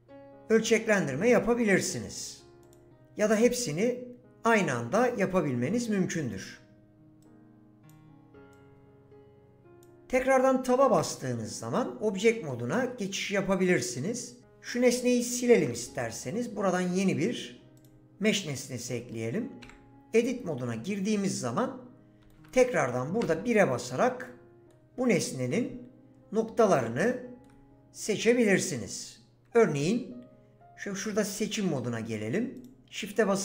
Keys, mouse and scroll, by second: 2.7 click, 7.2 click, 10.9 Tab, 14.4 Delete, 15.5 shift+a, 19.6 Tab, 23.2 1, 23.8 click, 28.9 click, 31.3 click.